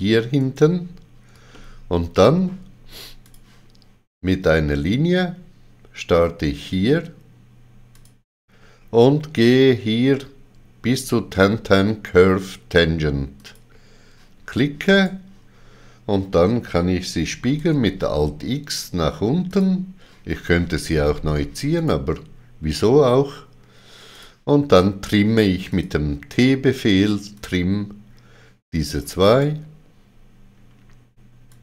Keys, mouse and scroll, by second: 0.4 right click, 1.5 ctrl+middle click, 3.2 click, 7.9 click, 7.9 ctrl+middle click, 13.4 click, 15.0 right click, 17.6 alt+x, 19.5 click, 21.8 right click, 24.1 click, 25.7 click, 29.3 right click, 31.5 click.